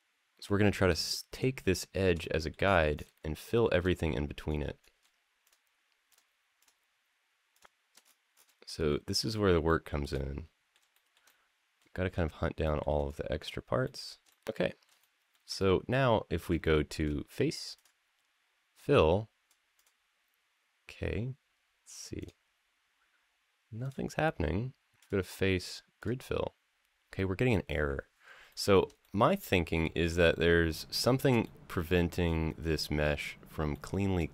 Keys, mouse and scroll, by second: 0.7 shift+click, 1.1 shift+click, 1.4 shift+click, 2.0 middle drag, 2.4-3.2 scroll down 4, 3.2 shift+middle drag, 3.9-4.8 scroll up 4, 5.2 shift+click, 5.9 shift+click, 6.4 shift+click, 7.3 shift+click, 7.8-8.3 scroll down 2, 8.5 shift+middle click, 8.9 shift+middle click, 9.5 shift+middle click, 9.9 middle click, 10.8 shift+middle click, 11.0 middle click, 12.4 shift+middle click, 12.8-13.6 scroll up 4, 13.6 middle click, 14.2 shift+middle click, 14.2 scroll down 2, 14.8 shift+middle click, 15.4-16.1 middle drag, 16.4 shift+middle click, 17.5-19.7 drag, 22.0 click, 23.6 click, 24.8-26.0 drag, 28.3 shift+middle click, 28.6 scroll down 1, 28.8-31.0 middle drag, 31.2-33.1 middle drag, 33.5 shift+middle click, 34.1-34.3 middle drag.